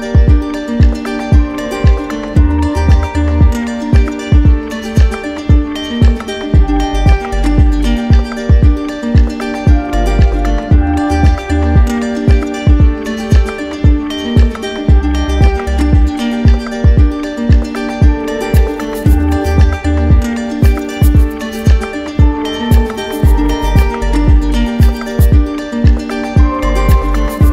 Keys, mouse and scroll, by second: 1.6 click, 4.7 click, 5.1 ctrl+d, 5.9 ctrl+d, 7.6 click, 8.5 click, 9.3 alt+click, 9.7 alt+click, 11.3 click, 12.7 click, 16.3 click, 17.1 alt+click, 17.3 alt+click, 18.4 click, 19.3 click, 19.9 click, 20.3 shift+click, 20.5 shift+click, 21.0 alt+click, 23.1 click, 24.6 click, 25.7 click.